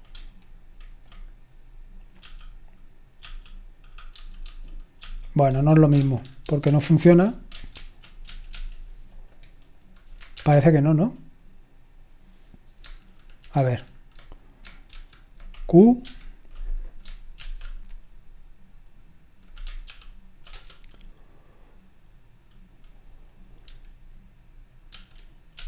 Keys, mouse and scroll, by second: 0.0-1.0 scroll up 1, 1.0 alt+click, 2.2-8.7 typing, 6.4 Down, 6.6 Up, 9.3 click, 10.4 super+Return, 13.5 super+Left, 14.9 super+h, 16.0 q, 17.4 super+w, 19.9 ctrl+p, 20.5 Return, 25.5 q.